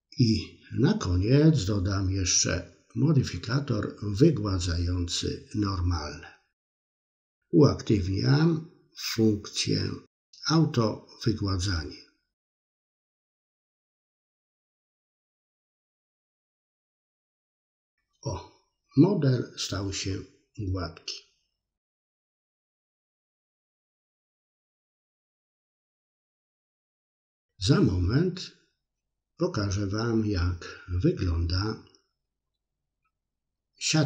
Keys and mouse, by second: 5.0-10.3 drag, 11.9 click, 16.0-17.8 drag, 17.8-25.0 middle drag, 26.6 click, 28.4-30.5 middle drag, 32.3 click, 33.0-34.0 middle drag.